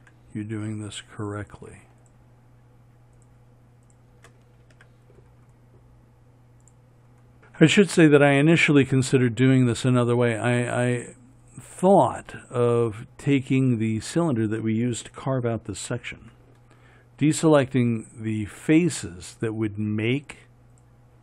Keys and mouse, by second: 0.4 f, 5.2 f, 16.6 f.